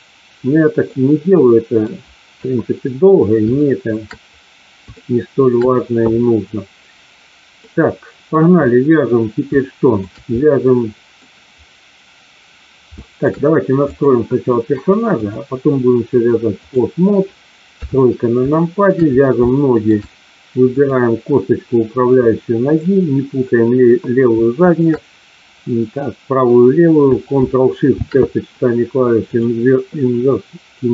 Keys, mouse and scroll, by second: 0.9-1.9 middle drag, 2.4 KP_1, 3.5-4.0 shift+middle drag, 4.9-5.6 shift+middle drag, 7.5-8.2 middle drag, 9.5-9.9 shift+middle drag, 10.4-11.2 middle drag, 12.9 shift+middle drag, 13.9 click, 15.1-16.7 drag, 17.7 KP_3, 18.5 shift+middle click, 19.5 shift+middle click, 20.7 click, 22.2 middle click, 24.6 shift+click, 29.4 ctrl+shift+c.